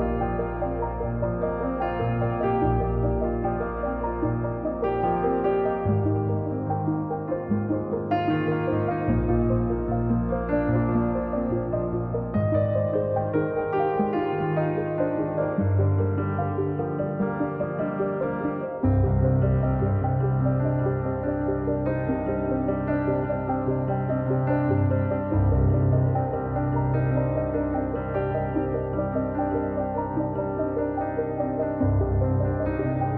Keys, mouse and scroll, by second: 0.1-0.5 scroll up 3, 0.6-2.3 drag, 2.3 scroll up 1, 2.5-3.6 drag, 5.6 middle click, 6.0 click, 6.9 middle click, 7.3-8.5 drag, 9.5 middle click, 9.9-11.1 drag, 11.1 middle click, 11.5-12.5 drag, 12.5 middle click, 13.2-14.7 drag, 14.7 scroll down 1, 14.7 middle click, 15.1-16.1 drag, 16.1 middle click, 16.5-17.7 drag, 18.3 middle click, 18.8 click, 19.7 middle click, 20.5 KP_1, 21.3 click, 21.7-22.3 scroll up 6, 22.3-22.8 scroll down 1, 22.9 scroll up 2, 23.1-24.3 drag, 29.7 middle click, 29.9-30.3 scroll down 3, 30.3 middle click, 30.5 scroll up 1, 30.7-31.8 drag, 32.0 middle click, 32.5-33.1 drag.